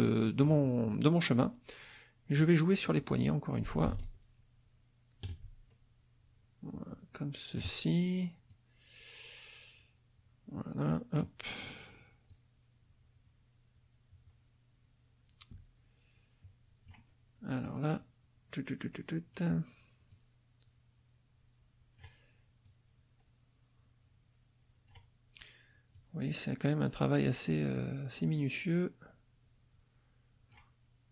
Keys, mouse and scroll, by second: 0.0 click, 2.4-7.7 drag, 8.5-11.3 drag, 12.3-17.1 drag, 17.6-19.5 drag, 20.1-22.2 drag, 22.6-25.1 drag, 25.9-30.7 drag.